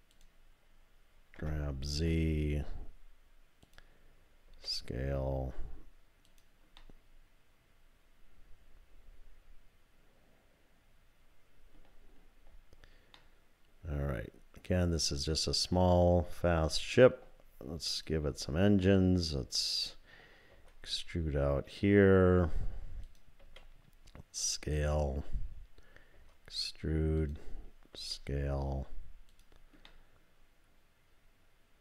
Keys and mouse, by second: 1.4 g, 4.5 s, 6.8-11.8 middle drag, 13.2-17.0 middle drag, 18.0 click, 18.8 click, 20.5 e, 23.4 s, 26.2 e, 27.9 s, 29.9-31.8 drag.